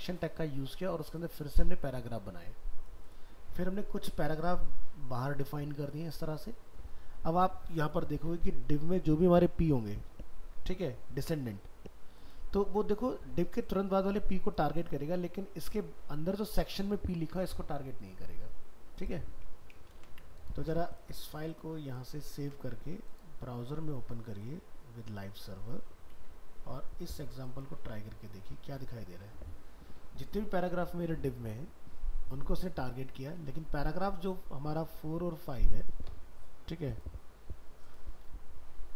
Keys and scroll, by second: 19.9 ctrl+s.